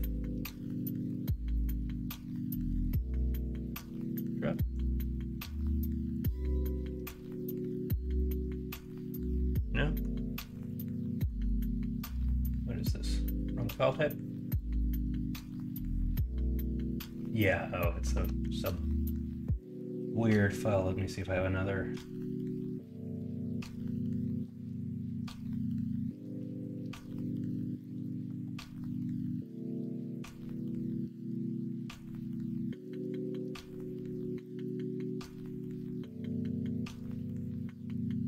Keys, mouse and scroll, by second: 8.0-10.0 middle drag, 11.0 middle click, 26.0 middle click, 26.3 KP_1, 27.0 KP_3, 36.5 s.